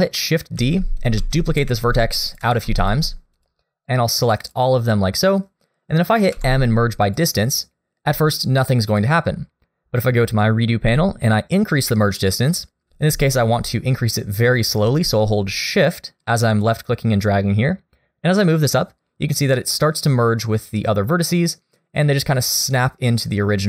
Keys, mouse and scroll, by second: 0.6 shift+d, 1.2 shift+d, 1.4-2.4 scroll up 2, 1.9 shift+d, 2.7 scroll up 1, 2.7 shift+d, 3.4 click, 3.9 click, 6.3 m, 8.9 click, 16.7 shift+click.